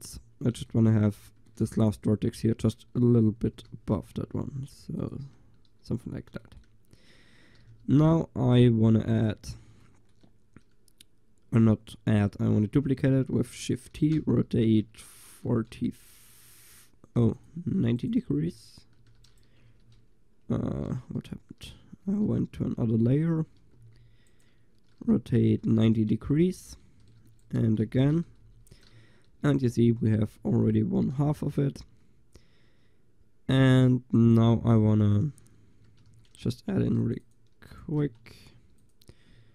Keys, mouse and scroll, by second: 3.6 g, 5.2 click, 5.3 Tab, 6.5 click, 7.7 shift+d, 9.5-9.9 middle drag, 14.2 r, 16.3 click, 17.3 Delete, 19.0 shift+d, 19.7 4, 22.1 2, 22.6 1, 23.8 g, 25.0 r, 26.0-27.4 drag, 27.3 shift+d, 27.5 drag, 27.8 r, 28.9-30.0 drag, 30.3 a, 34.2 click, 35.8 Tab, 36.1 a, 36.8 ctrl+r, 38.1 space.